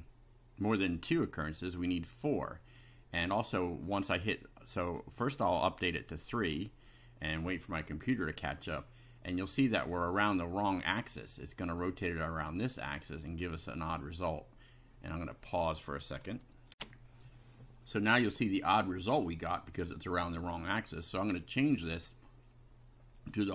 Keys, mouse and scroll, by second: 3.3 middle click, 4.8 click, 6.2 click, 8.7-9.6 middle drag, 16.7 ctrl+r, 18.7-20.6 middle drag, 23.2 click.